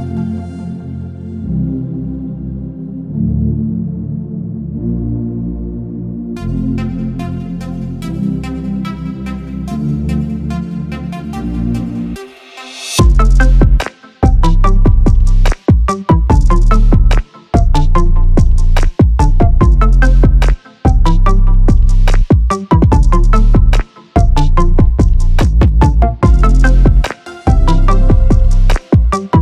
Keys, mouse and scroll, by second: 0.0 shift+click, 1.3 click, 5.5 shift+click, 6.6 click, 15.3 click, 21.7 click.